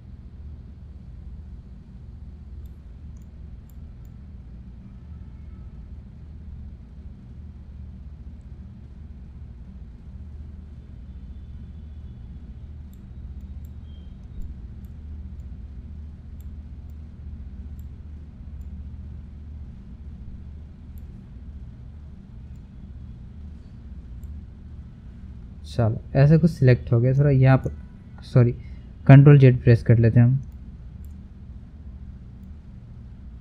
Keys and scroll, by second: 29.7 ctrl+z.